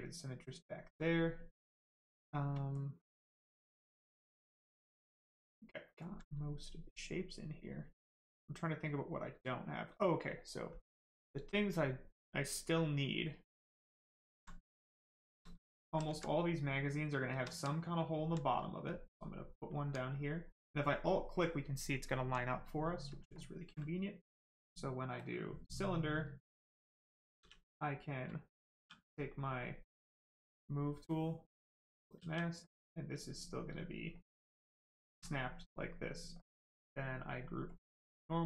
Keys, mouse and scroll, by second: 2.6 alt+right click, 6.4 right click, 14.0 alt+right click, 14.6 right click, 15.8 alt+click, 16.2 right click, 17.5 alt+right click, 18.0 alt+right click, 18.8 alt+click, 20.0 right click, 22.2 right click, 23.3 ctrl+click, 24.0 click, 25.8 right click, 27.4 e, 27.7 right click, 28.8 w, 29.3 right click, 31.6 click, 32.2 w, 32.5 right click, 33.8 shift+click, 35.5 right click, 37.7 click.